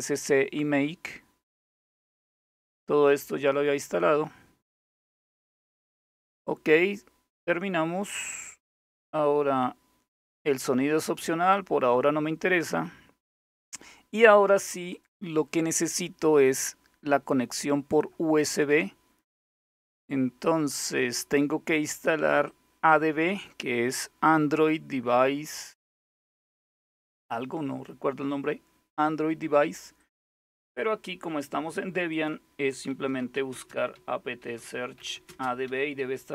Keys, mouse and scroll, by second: 1.3-2.1 scroll up 1, 2.8-4.5 drag, 4.8 click, 5.3 scroll down 2, 5.4 click, 7.1-8.1 scroll up 1, 8.1-8.8 scroll down 2, 8.8-9.7 scroll down 1, 11.3-12.2 scroll down 2, 12.4-13.2 scroll down 2, 13.2-14.6 scroll down 1, 14.6 click, 16.9 click, 18.1 click, 19.0 scroll down 2, 22.1 click, 26.7 click, 29.6 click, 30.3 click, 31.7 click, 32.6-36.3 typing.